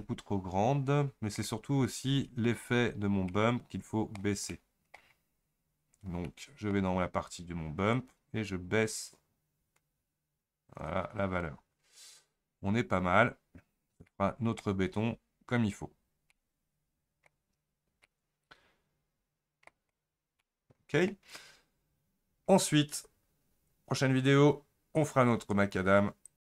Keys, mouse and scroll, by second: 0.0-8.2 shift+middle drag, 8.2-11.0 drag, 12.3 scroll up 2, 12.7 scroll down 2, 14.1 scroll up 1, 14.1 middle click, 14.7 scroll down 2, 16.3 scroll up 1, 16.3-17.5 middle drag, 17.5-18.1 scroll down 3, 18.1-20.0 middle drag, 20.0 scroll up 1, 20.6-21.5 middle drag, 21.5-22.3 scroll down 1, 23.0 scroll down 3.